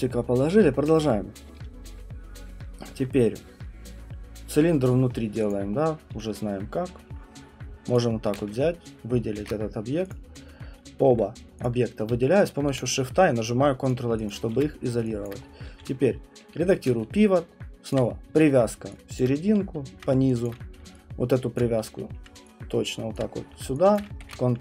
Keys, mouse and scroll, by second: 1.0 alt+middle click, 2.2 middle click, 5.5 click, 5.7 middle click, 5.8 middle click, 5.8 alt+middle click, 6.1 w, 9.4 ctrl+1, 10.1 click, 10.6 middle click, 11.6 click, 12.4 shift+click, 13.9 click, 14.3 click, 14.5 w, 15.2 alt+click, 15.4 middle click, 15.7 d, 16.4 alt+middle click, 17.0-18.8 typing, 17.9 click, 18.6 middle click, 19.2 alt+click, 19.9-23.3 typing, 20.4 alt+click, 21.6 click, 23.2 click, 24.0 alt+click, 24.3 ctrl+1.